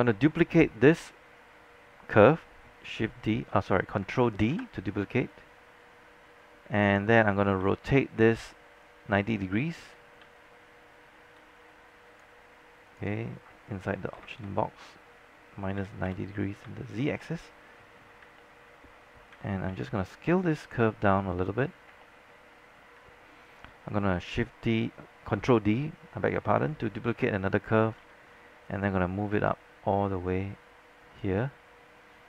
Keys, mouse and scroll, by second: 4.6 ctrl+d, 5.4-7.6 drag, 7.7 e, 8.9 click, 10.3-11.4 j, 12.7 j, 13.0 click, 14.2 KP_Subtract, 15.9 KP_9, 16.2 KP_0, 16.6 KP_Enter, 18.1 scroll down 1, 18.5 alt+middle click, 19.1 scroll up 1, 19.4-19.8 typing, 20.5-21.8 drag, 21.8 scroll up 1, 22.2 alt+middle click, 27.2 ctrl+d, 28.1 ctrl+w, 28.7-31.9 drag.